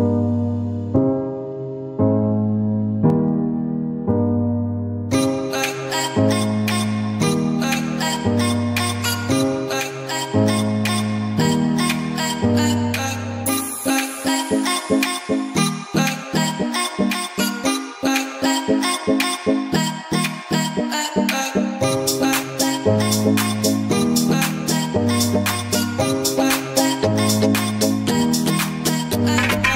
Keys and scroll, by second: 0.5 ctrl+z, 3.1 ], 3.7 [, 6.5 ctrl+z, 7.8 ctrl+z, 8.0 [, 11.0 [, 13.3 ctrl+z, 14.0 ], 14.1 [, 14.9 ctrl+z, 17.8 ], 20.2 ], 21.6 [, 22.7 [, 23.8 [, 26.3-27.9 typing.